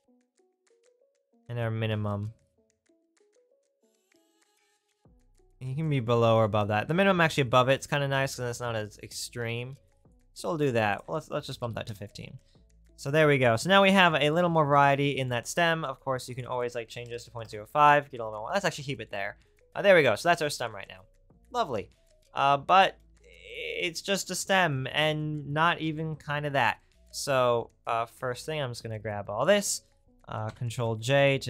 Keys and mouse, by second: 30.5 ctrl+j.